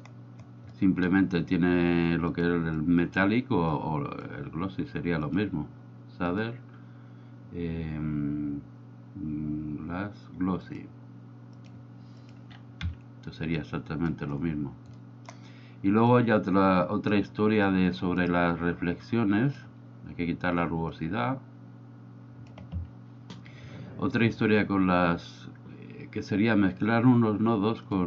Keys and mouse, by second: 0.7 middle click, 2.8-3.3 drag, 3.8 click, 12.2 click, 13.8 click, 15.1 middle click, 16.2-17.4 drag, 18.2 click, 19.3-19.7 drag, 21.2-22.9 drag.